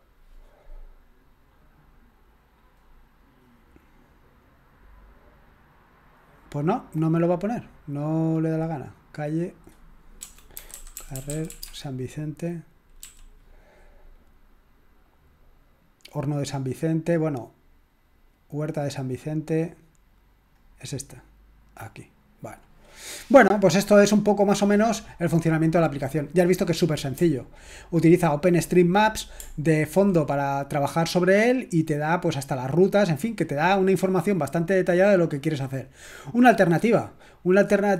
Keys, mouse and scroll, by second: 6.1-8.2 drag, 9.4 click, 10.2-12.1 typing, 20.6 click, 27.7-30.7 scroll up 1, 30.7-31.6 scroll up 1, 31.6-32.2 scroll up 1, 33.6-36.4 drag.